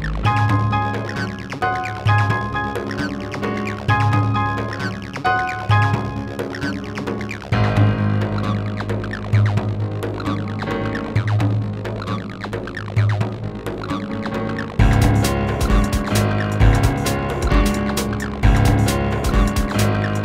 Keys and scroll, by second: 7.4 q, 12.8 w.